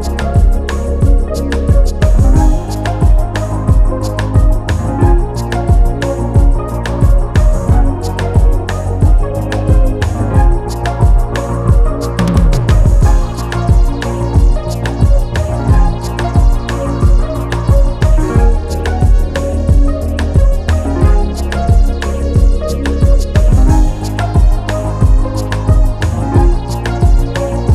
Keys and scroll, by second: 2.8 ], 5.6 ctrl+z, 8.0-8.7 typing.